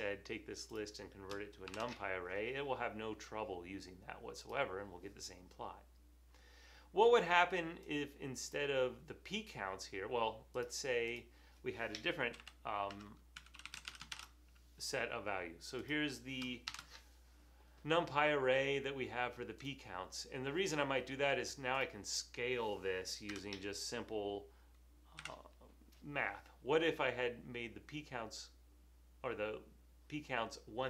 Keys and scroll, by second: 1.7-2.5 typing, 12.1-14.7 typing, 16.5-17.3 typing, 23.4 typing, 25.4 3.